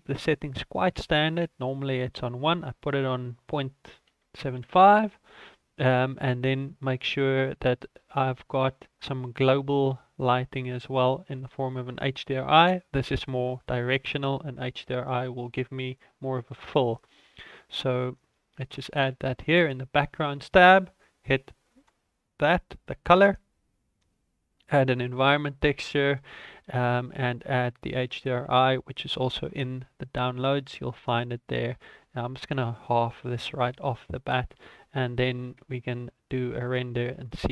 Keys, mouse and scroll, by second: 0.2 click, 1.9 click, 13.6 ctrl+s, 18.0 click, 21.7 click, 25.7 click, 32.3 click.